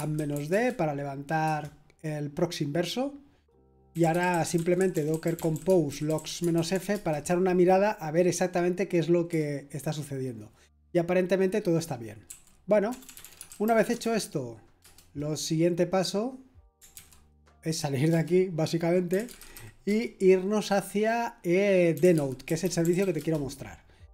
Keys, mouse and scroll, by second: 0.0-2.1 typing, 3.6-7.4 typing, 9.3 typing, 12.0-14.1 typing, 14.8 Return, 16.9 ctrl+c, 18.1 Return, 18.8-20.0 typing, 21.7-24.1 typing.